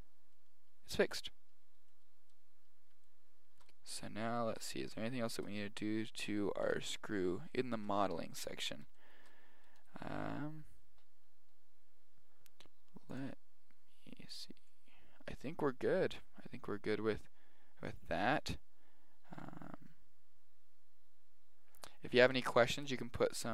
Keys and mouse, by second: 0.1 middle click, 0.4 middle click, 6.6 KP_1, 7.5-9.8 middle drag, 9.8 right click, 22.5-23.5 middle drag.